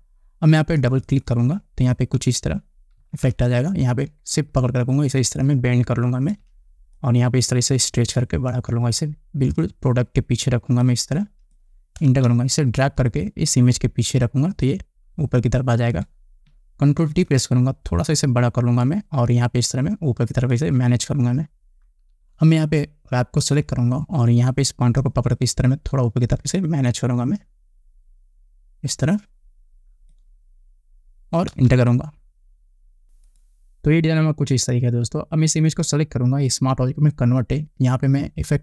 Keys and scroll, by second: 3.7 ctrl+t, 12.8 Return, 17.7 ctrl+t, 32.2 Return.